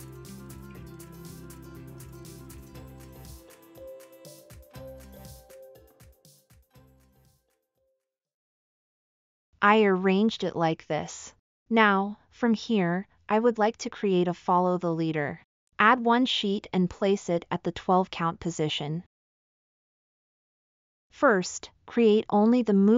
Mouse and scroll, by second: 7.0 middle drag, 11.6-12.4 scroll up 6, 16.1-16.9 middle drag, 17.2 scroll.